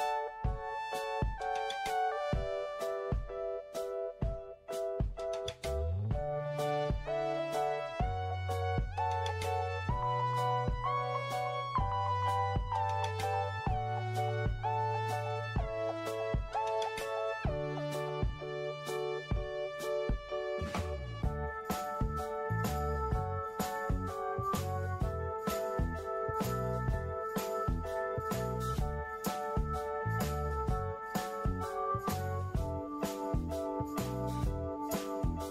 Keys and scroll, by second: 1.9 BackSpace, 4.0 4, 7.0 ctrl+x, 8.4 ctrl+a, 9.4 Delete, 10.5 ctrl+shift+v, 21.3 ctrl+g, 28.3 f, 32.4 ctrl+1.